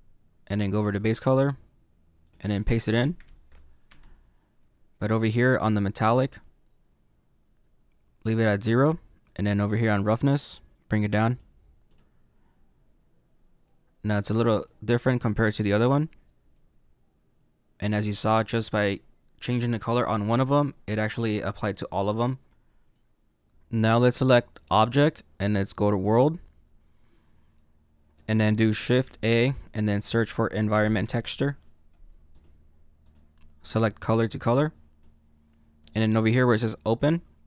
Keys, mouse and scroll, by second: 3.8 click, 10.9 click, 11.9 click, 12.7-13.6 scroll down 2, 13.6 middle click, 16.5 middle click, 22.9 middle click, 34.9 click, 37.0 click.